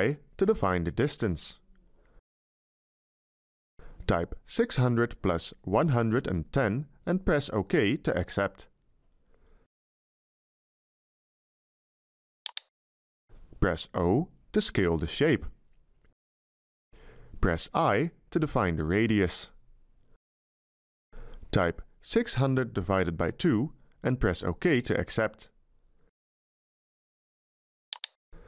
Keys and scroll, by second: 2.3 Delete, 4.7-6.3 typing, 7.9 1, 13.9 o, 17.7 i, 19.5 Delete, 22.0-24.2 typing.